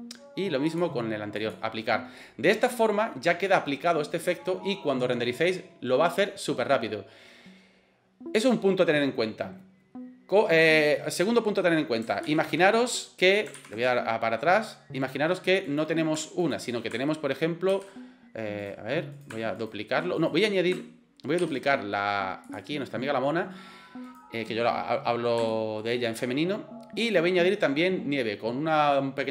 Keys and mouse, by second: 0.7-1.7 right drag, 2.2 middle click, 12.4 ctrl+z, 13.8 ctrl+z, 15.7 right click, 16.4 shift+click, 17.7 shift+g, 18.6 click, 19.1 click, 19.6 shift+click, 20.2 right click, 21.5 shift+d, 22.7-23.3 middle drag, 24.1 right click, 25.5-25.8 shift+middle drag, 27.0 click.